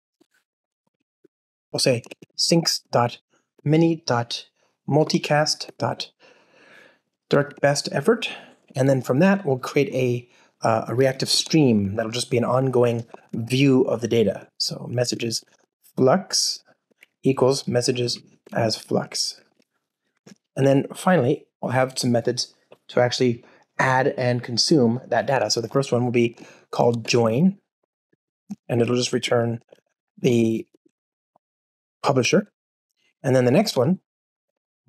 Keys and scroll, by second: 1.7 alt+BackSpace, 7.2 Return, 17.4 Return, 26.1 Return, 34.5 alt+BackSpace.